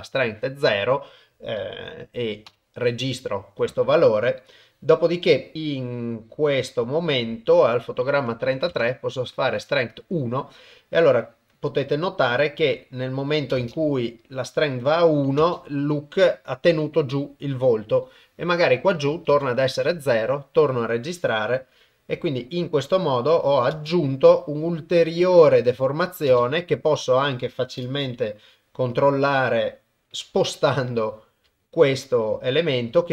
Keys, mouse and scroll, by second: 2.5 i, 4.6-7.6 drag, 8.3 click, 11.2-13.2 drag, 13.6 shift+space, 15.4 shift+space, 19.1 click, 21.1 click, 22.4 ctrl+middle click, 23.8 shift+space, 26.4 shift+space, 27.9 shift+space, 29.0 click, 30.2 g, 32.4 click.